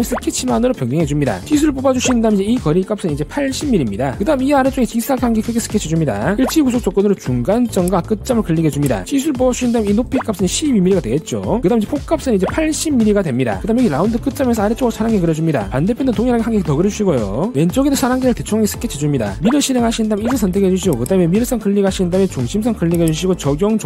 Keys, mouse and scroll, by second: 1.1 click, 1.6 click, 2.0 click, 3.8 click, 4.4 scroll up 1, 4.6 middle click, 5.3 3, 5.7 click, 6.3 click, 7.0 click, 8.1 click, 9.1 click, 9.3 click, 9.9 click, 10.2 click, 10.4-11.3 typing, 11.1 click, 11.8 click, 12.4 click, 13.4 click, 13.7 1, 14.5 click, 16.3 click, 18.2 click, 20.0 click, 21.3 click, 22.4 click, 23.4 click.